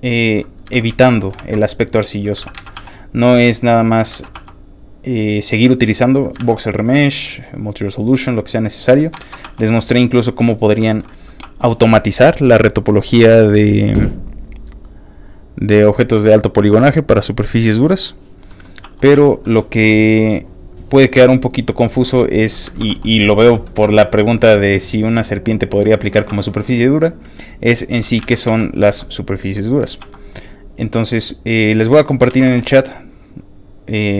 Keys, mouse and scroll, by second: 0.2 click, 0.7 ctrl+z, 0.9 ctrl+z, 1.1 ctrl+middle click, 1.4 ctrl+z, 1.7 ctrl+click, 1.9 ctrl+click, 2.1 ctrl+click, 2.4 ctrl+z, 2.7 f, 2.9 ctrl+click, 3.1 ctrl+click, 3.4 ctrl+click, 4.1 ctrl+z, 4.4 f, 4.4 click, 4.6 click, 4.9 click, 5.1 click, 5.4 click, 5.6 click, 5.8 click, 6.4 ctrl+z, 6.6 ctrl+click, 7.1 ctrl+click, 7.4 ctrl+click, 7.6 ctrl+click, 7.8 ctrl+click, 8.1 ctrl+click, 8.3 ctrl+click, 8.4 ctrl+click, 8.6 ctrl+click, 9.2 ctrl+z, 9.5 f, 9.5 ctrl+click, 9.8 ctrl+click, 10.2 ctrl+click, 10.6 ctrl+click, 10.9 shift+middle click, 11.5 click, 11.5 shift+f, 12.6 click, 13.7 click, 14.7 click, 15.3 click, 15.7 click, 16.8 click, 17.5 click, 18.4 scroll down 2, 18.6 middle click, 18.8 f, 18.9 click, 19.2 click, 19.2 f, 19.4 middle click, 20.3 click, 20.8 click, 21.6 click, 21.9 click, 22.7 ctrl+z, 22.9 f, 23.1 ctrl+click, 23.7 ctrl+shift+middle click, 24.0 shift+middle click, 24.3 shift+f, 24.5 click, 24.7 click, 25.3 click, 26.2 ctrl+z, 26.4 ctrl+click, 27.0 ctrl+click, 27.7 ctrl+click, 28.2 ctrl+z, 28.6 ctrl+click, 28.8 f, 28.9 click, 29.2 click, 29.5 middle click, 30.0 f, 30.1 click, 30.3 click, 30.7 click, 31.0 click, 31.3 click, 31.9 middle click, 32.3 ctrl+z, 32.4 f, 32.6 ctrl+click, 32.8 ctrl+click, 33.2 ctrl+click, 33.8 ctrl+click.